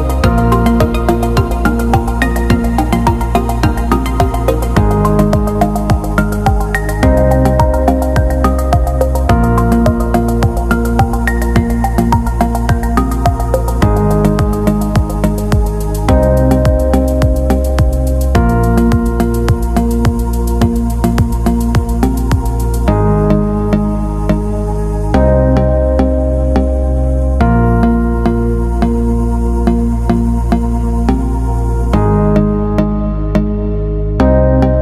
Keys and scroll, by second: 6.9 i, 29.7 i.